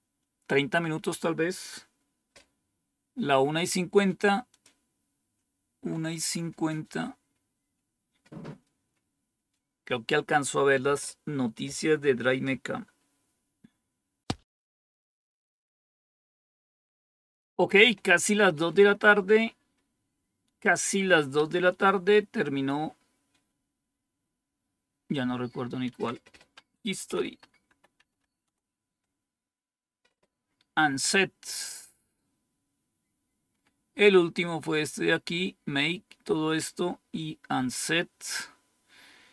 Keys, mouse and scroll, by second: 4.4 click, 5.1-5.8 scroll down 2, 5.8-6.3 scroll up 3, 20.7 click, 21.3 Page_Up, 21.6-24.0 drag, 26.7-28.1 typing, 28.4 Return, 32.0-33.5 scroll down 1, 33.5-37.9 scroll down 1, 37.9 scroll down 1.